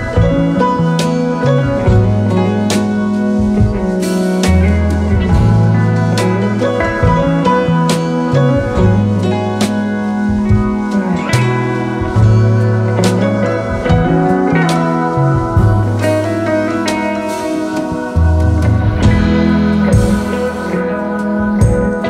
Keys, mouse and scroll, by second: 0.9-1.8 typing, 2.9 typing, 3.8 Return, 5.3 typing, 10.3 ctrl+alt+2, 11.3 double click.